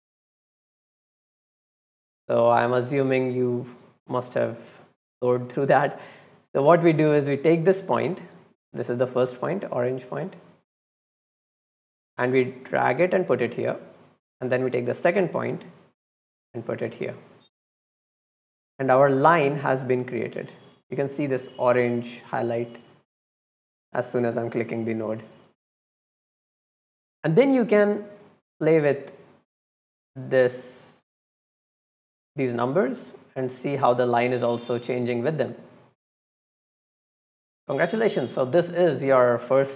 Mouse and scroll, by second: 3.0-3.7 drag, 3.9 scroll down 1, 4.3-6.0 scroll up 1, 7.4 click, 8.0 click, 10.5-12.5 drag, 13.8 drag, 14.9-16.7 drag, 18.0 click, 19.0 click, 19.7 middle click, 19.7 scroll up 1, 20.2 middle click, 20.2 scroll down 1, 21.8 click, 22.6 click, 23.1 click, 23.5 click, 24.0 click, 24.4 click, 24.8 click, 25.2 click, 26.7 scroll down 2, 27.1 middle click, 27.8-28.5 drag, 29.5 click, 30.7 click, 32.2 click, 32.9-33.2 drag, 33.8 click, 36.2 click, 36.7 middle click, 36.9 right click, 39.0 click.